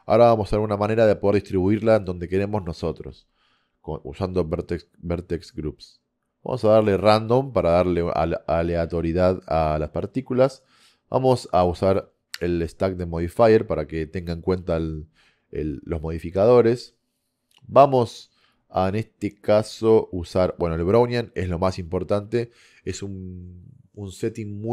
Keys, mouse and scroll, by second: 0.1-5.2 middle drag, 5.3-7.4 middle drag, 9.3-14.2 middle drag, 15.6-21.8 middle drag.